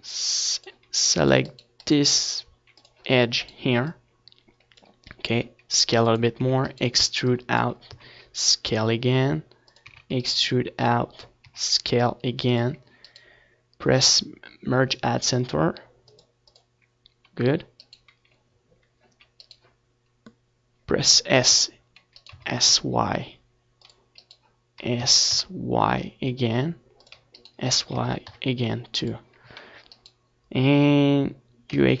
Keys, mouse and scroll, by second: 1.4 z, 1.7 z, 3.6-5.4 drag, 4.2-8.1 right drag, 5.8-8.6 drag, 8.3 s, 9.0-11.8 drag, 9.2 e, 9.7-11.3 right drag, 10.8 s, 12.7-13.9 drag, 12.7 e, 13.0 right click, 14.9 click, 16.5 w, 16.9 right click, 17.0 click, 17.2-19.1 right drag, 20.3-23.8 right drag, 23.8 s, 24.6-26.3 right drag, 24.7 s, 26.3-28.1 drag, 26.4-28.1 right drag, 27.3 s, 29.3-31.0 drag, 29.6-31.1 right drag, 30.1 s, 31.1 click, 31.3-32.0 drag.